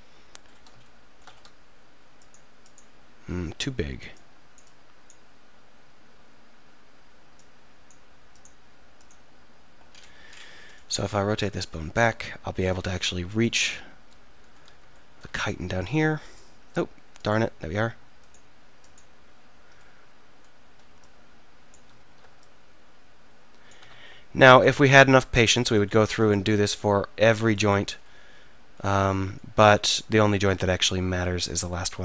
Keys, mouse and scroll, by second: 2.2-8.0 right drag, 10.7-11.1 drag, 10.7-11.4 right drag, 11.1 r, 14.2-15.6 middle drag, 15.9 middle click, 16.4-18.2 middle drag, 19.9 middle click, 21.0-22.0 middle drag, 22.0 ctrl+z, 23.9 ctrl+z, 29.2-32.0 middle drag.